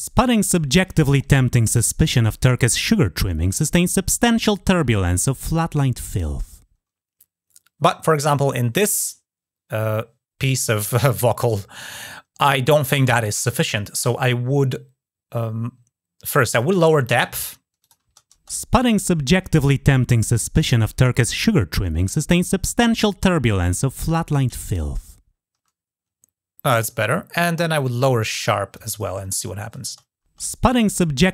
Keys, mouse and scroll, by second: 16.3 click, 17.6 click, 27.1 click, 27.8-28.8 drag, 29.1 click.